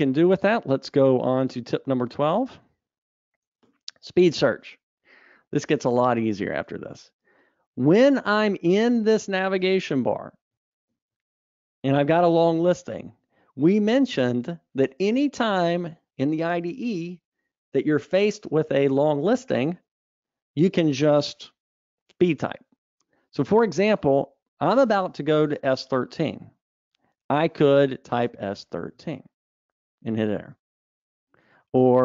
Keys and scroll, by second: 2.4 super+Up, 11.4 super+Up.